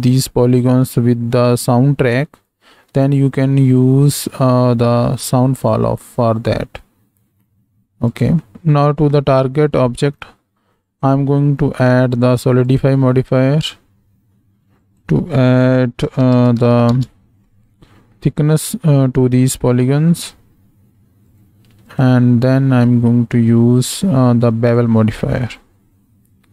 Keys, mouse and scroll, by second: 2.5 shift+a, 8.1 click, 8.5-9.1 middle drag, 10.8-12.8 drag, 13.3 middle click, 14.8-17.3 drag, 18.1-18.5 middle drag, 19.5-20.3 middle drag, 21.4 drag, 21.9-24.8 drag, 25.3 middle click.